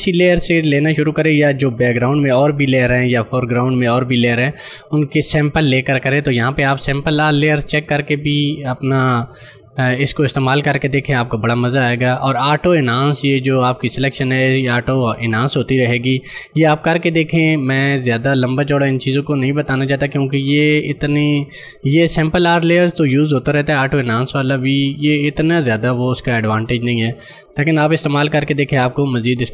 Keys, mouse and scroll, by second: 7.2 click, 11.7 click, 18.8 click.